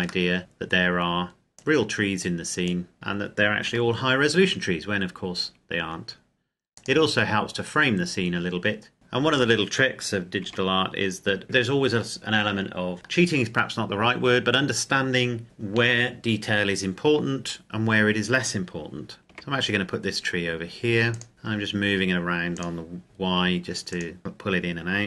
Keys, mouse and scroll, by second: 0.4 middle click, 0.7-1.8 scroll down 1, 1.8 click, 2.9 right click, 3.9 g, 6.9 click, 7.5-8.0 scroll up 1, 9.5 right click, 10.6 g, 11.4 click, 19.2 click, 19.3 g, 21.2 click, 21.3 g, 22.6 click, 23.0 g, 23.9 click, 24.2 right click.